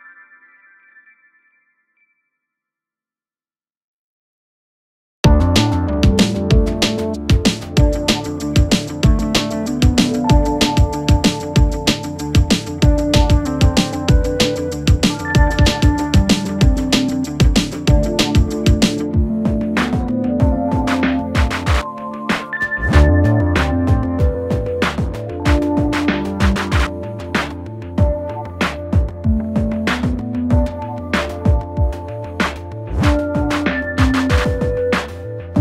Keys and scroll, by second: 28.1 Escape, 35.4-35.6 typing.